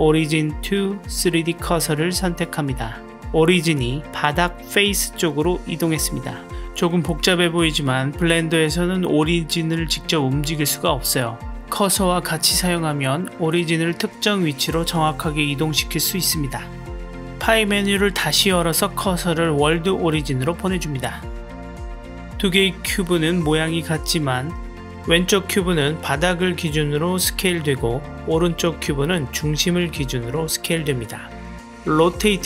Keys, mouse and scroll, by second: 1.7-4.2 middle drag, 17.9 shift+s, 20.7-21.8 middle drag, 22.2 drag, 22.7-24.3 middle drag, 25.1 click, 25.4 s, 28.9 click, 29.6 s, 31.6 r.